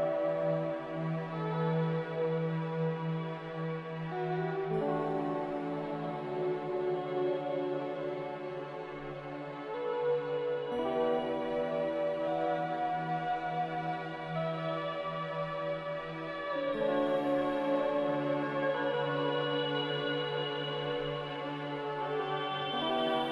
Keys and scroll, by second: 0.2 ctrl+z, 2.2 b, 18.2 m.